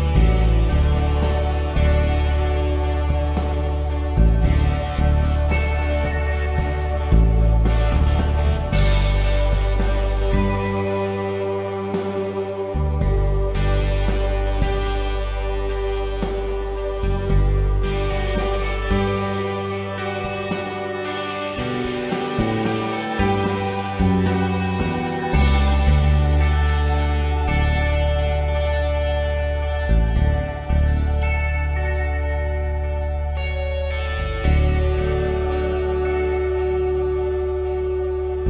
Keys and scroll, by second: 0.4 ctrl+d, 1.3 space, 6.8 ctrl+l, 13.9 ctrl+v, 15.3 ctrl+t, 17.6 Return, 20.0 ctrl+t, 20.3 Return, 21.1 space, 21.3 ctrl+t, 21.6 Return, 22.0 ctrl+t, 22.8 Return, 27.1 ctrl+Delete, 27.7 ctrl+d, 28.2 v, 29.6 ctrl+z, 30.8 ctrl+t, 31.7 Return, 31.9 Right, 32.1 Left, 32.6 ctrl+t, 32.8 Return.